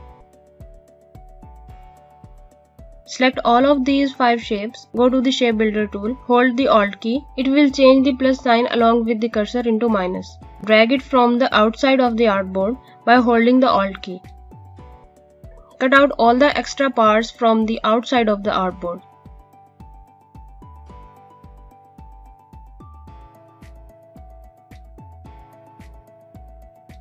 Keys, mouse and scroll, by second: 0.1 right click, 2.1 click.